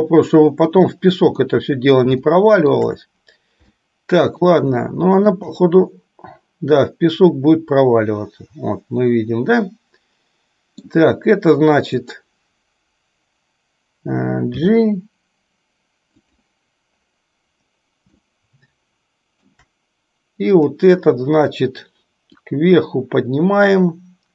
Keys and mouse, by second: 1.7 middle click, 2.5 shift+middle click, 4.1 shift+middle click, 5.1 shift+middle click, 5.8-11.1 middle drag, 12.1 click, 14.8 g, 18.4-19.6 shift+middle drag, 20.7 click, 22.7-24.3 drag.